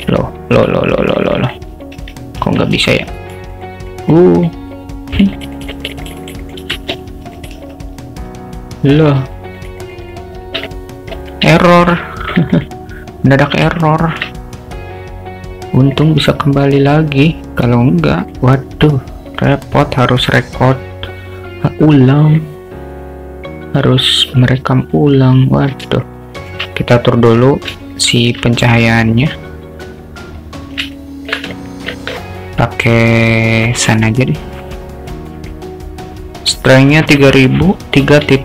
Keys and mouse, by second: 9.0 Escape, 9.9 click, 10.1 click, 10.8 alt+middle click, 11.7 shift+middle click, 12.1 alt+middle click, 12.6 click, 13.8 alt+shift+middle click, 16.1 click, 16.7 click, 18.3 click, 20.6 click, 26.2-26.5 alt+shift+middle drag, 27.9-28.3 alt+shift+middle drag, 29.0 alt+middle drag, 30.0-31.3 drag, 31.6-31.9 alt+middle drag, 35.4-38.4 drag.